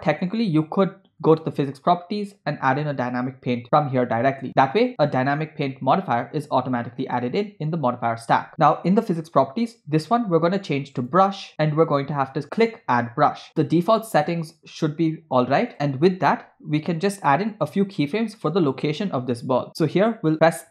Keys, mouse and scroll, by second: 1.2 click, 3.0 click, 4.8 click, 8.5 click, 10.1-11.2 drag, 12.6 click, 13.5 scroll down 5, 15.7 click.